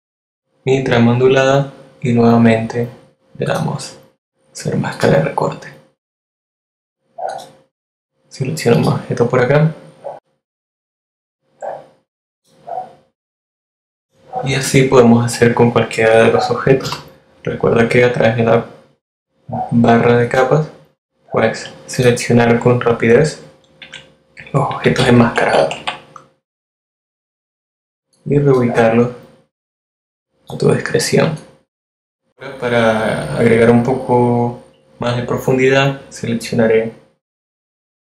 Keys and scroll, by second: 15.8 F7, 22.8 shift+Left, 24.0 shift+Up.